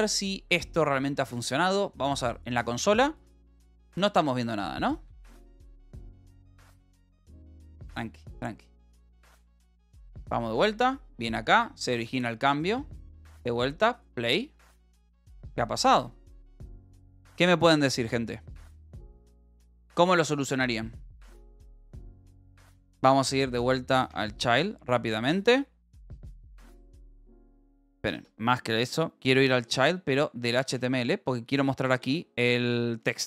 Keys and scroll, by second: 21.8-23.1 typing, 24.2 Return, 24.7-28.0 typing, 29.1-30.2 typing, 30.5 Up, 30.6 Return, 32.5 shift+o.